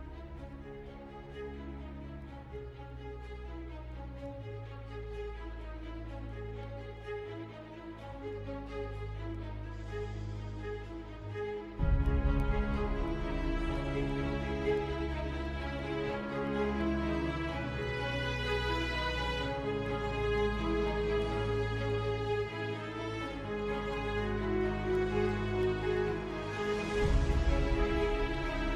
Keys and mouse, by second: 1.3 s, 5.7 middle click, 6.6 middle click, 7.2 middle click, 7.5 middle click, 10.2 KP_7, 12.1 z, 12.9 ctrl+KP_Add, 15.1 ctrl+KP_Add, 16.5 shift+click, 18.5 shift+d, 20.6 g, 26.4 KP_3, 27.1 z, 28.6 z.